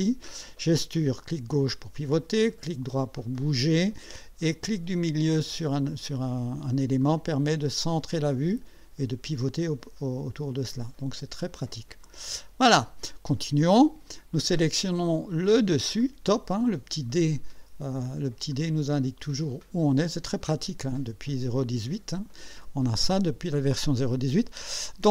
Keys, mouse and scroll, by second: 0.3 click, 1.3-3.9 drag, 2.4-3.9 right drag, 6.1 middle click, 7.0-10.7 drag, 10.8-11.7 right drag, 12.1 click, 15.4 click, 16.0 click, 18.5-20.1 drag.